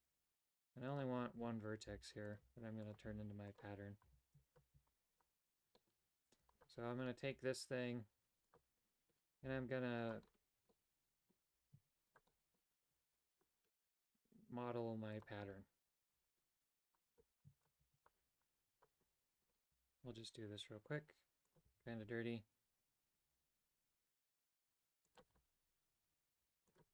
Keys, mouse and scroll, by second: 1.8-4.7 typing, 4.4 alt+right click, 5.7 shift+middle click, 7.2 g, 9.4 g, 10.6 middle click, 11.5 g, 12.2 middle click, 12.8 KP_7, 13.8 g, 16.2 right click, 17.0 right click, 17.7 x, 18.7 right click, 19.7 g, 21.6 e, 25.2 e.